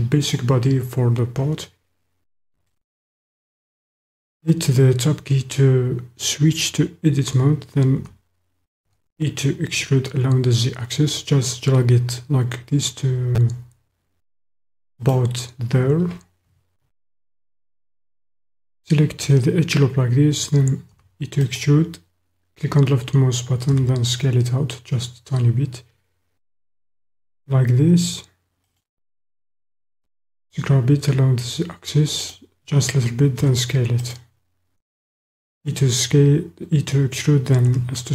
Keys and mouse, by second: 3.0 Tab, 8.2 e, 8.9 z, 15.1 click, 16.9-19.0 middle drag, 21.0 e, 21.5 click, 23.9 s, 28.7 click, 30.0 g, 30.6 z, 32.2 click, 33.4 e, 34.1 click, 37.6 s.